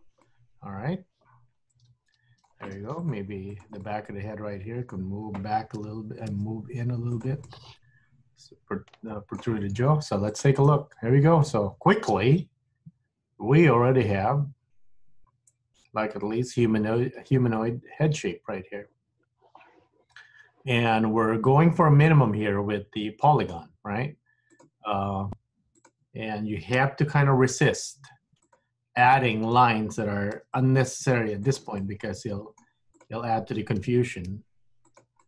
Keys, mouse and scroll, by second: 0.4 middle click, 3.0 click, 3.6 shift+click, 3.9 middle click, 5.9 g, 7.6 middle click, 10.4 click, 10.9 scroll up 2, 11.2 scroll down 3, 11.4 middle click, 23.6 scroll down 1, 23.9-24.6 scroll up 1, 24.6 click, 25.9 shift+click, 26.9 g, 29.1 click, 30.4 g, 31.8 middle click, 33.0 click, 33.8 g.